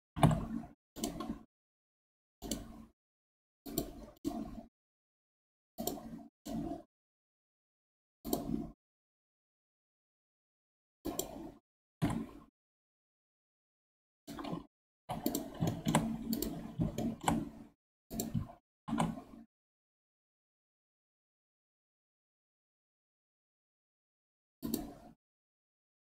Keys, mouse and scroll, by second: 0.1 g, 2.4-9.1 right drag, 9.1-10.5 middle drag, 10.5 scroll down 2, 11.0 click, 11.9 g, 15.7 shift+middle click, 16.3 click, 17.0-18.1 shift+middle drag, 18.1 click, 18.7 shift+s.